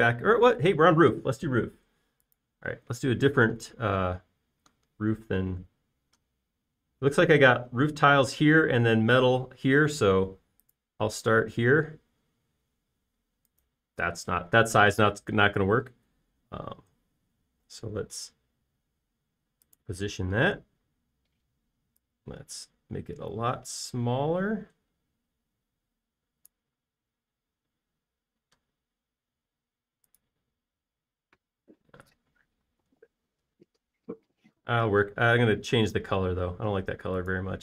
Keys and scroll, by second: 33.4 Escape, 33.6 space.